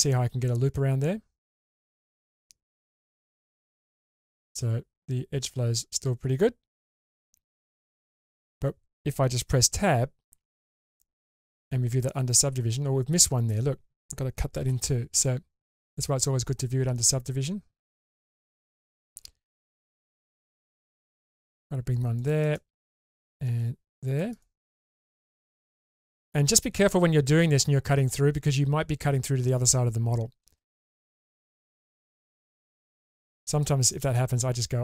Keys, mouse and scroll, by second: 10.3 Tab, 12.6 Tab, 14.7 k, 16.3-17.7 scroll up 2, 32.0 2, 32.5 click, 33.3 click, 33.9 middle click, 34.1-34.8 middle drag.